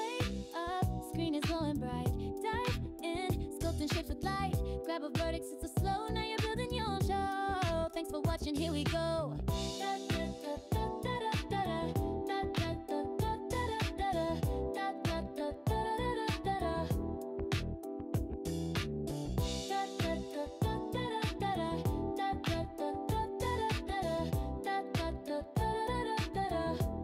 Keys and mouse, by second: 0.3 click, 4.3 click, 5.6 click, 6.9 click, 7.9 click, 9.1 click, 10.2 click, 12.3 click, 13.8 click, 14.7 shift+click, 16.0 m, 17.3 click, 22.7 click, 23.8 click, 25.0 click, 26.0 click.